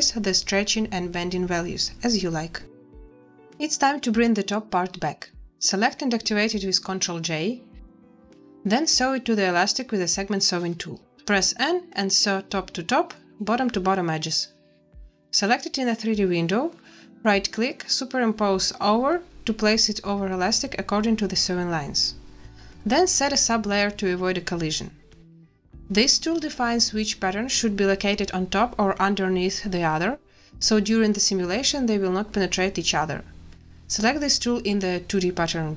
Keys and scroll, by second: 3.8 space, 6.1 a, 8.3 ctrl+j, 11.3 n, 15.0 a.